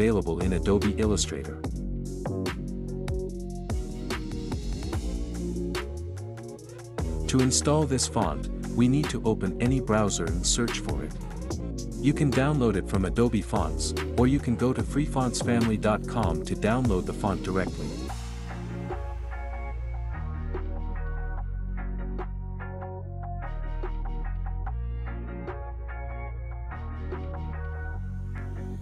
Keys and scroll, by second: 1.2 o, 1.5 n, 9.2-10.8 typing, 11.2 Return.